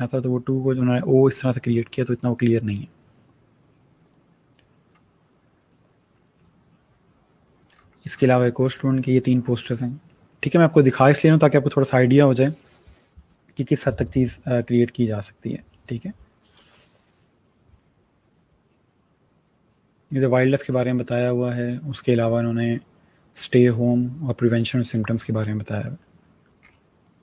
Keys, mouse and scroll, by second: 4.0 click, 4.8 scroll down 1, 6.3 click, 7.6 scroll down 1, 24.9 scroll down 1.